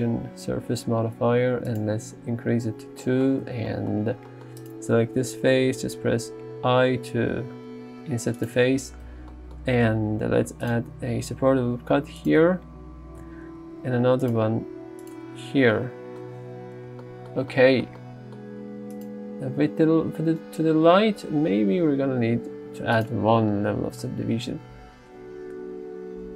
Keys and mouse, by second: 3.5 Tab, 6.1 i, 8.4 click, 8.6 Tab, 9.1 Tab, 10.4 ctrl+r, 10.7 click, 12.2 click, 12.5 Tab, 13.3 Tab, 13.9 ctrl+r, 14.4 click, 15.1 click, 15.2 Tab, 22.2 ctrl+1, 23.0 click.